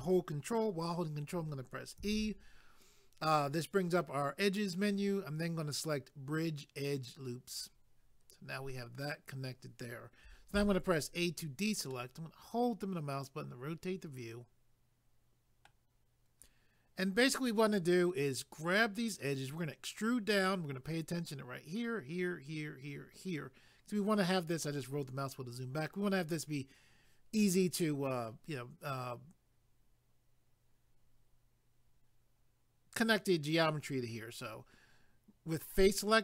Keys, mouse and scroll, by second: 2.0 ctrl+e, 7.5 click, 10.5 a, 11.9 middle click, 23.5-24.8 scroll down 1.